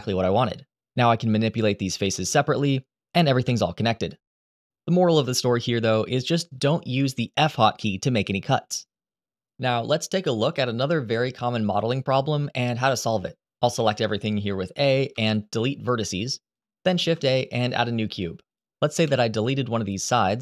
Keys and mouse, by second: 1.5 click, 2.0 2, 2.6 click, 2.9 middle click, 3.3 g, 3.9 click, 13.5 a, 14.9 Delete, 16.7 shift+a, 19.2 middle click, 19.8 3, 20.1 click.